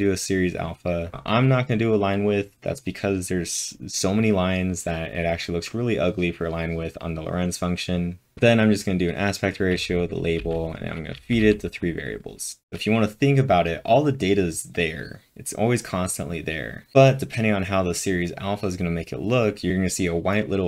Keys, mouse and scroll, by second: 1.1 j, 8.1-11.9 typing.